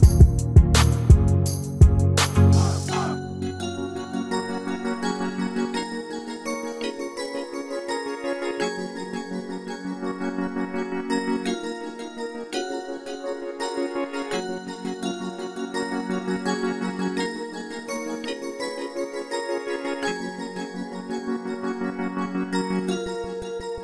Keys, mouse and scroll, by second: 1.0-2.2 middle drag, 2.7-4.6 drag, 2.9-4.4 middle drag, 4.7-7.2 middle drag, 7.2-9.0 right drag, 9.5 s, 11.0 a, 12.1 s, 17.6 r, 21.2-23.2 middle drag.